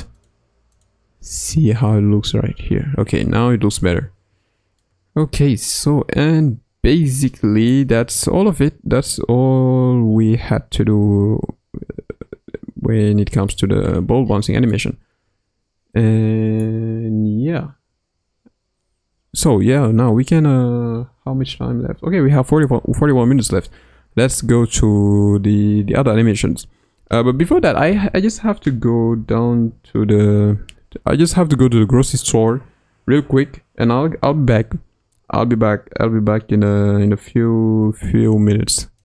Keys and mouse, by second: 0.6 click, 1.4 space, 4.8-13.4 middle drag, 14.7-16.6 middle drag.